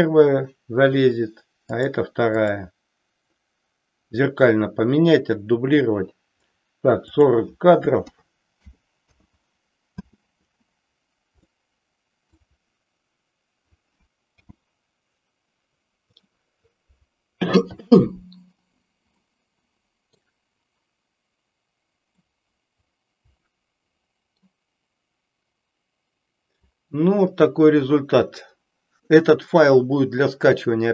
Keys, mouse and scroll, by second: 1.6-2.0 drag, 7.0-9.4 drag, 10.0 space, 11.6-12.4 middle drag, 14.4 n, 19.3-20.3 middle drag, 22.3-24.4 middle drag.